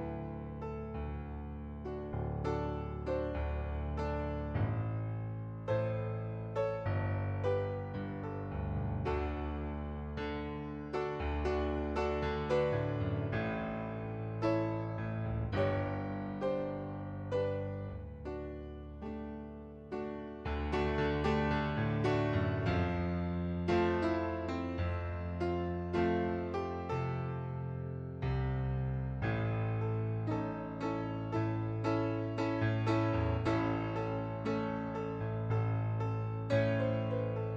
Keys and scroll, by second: 0.9 ctrl+d, 10.6 ctrl+d, 14.4 ctrl+d, 14.9 ctrl+d.